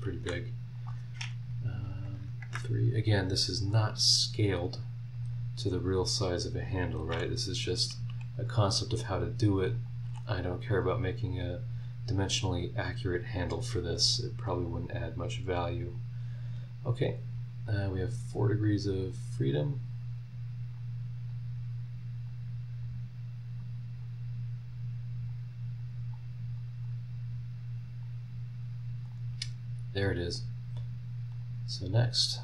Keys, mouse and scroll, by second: 0.2 Escape, 0.6 click, 2.2 KP_3, 2.5 KP_Enter, 5.1 click, 6.1 click, 7.1 h, 8.3 click, 9.7 click, 10.0 h, 11.4 click, 12.5 click, 13.9 click, 15.9 click, 19.0 click, 19.6 click, 20.8 click, 22.2 click, 23.0 middle click, 23.6 click, 24.2-25.3 middle drag, 25.3 click, 26.0 middle click, 26.1 click, 28.0-29.2 drag, 29.9 click, 31.3 click.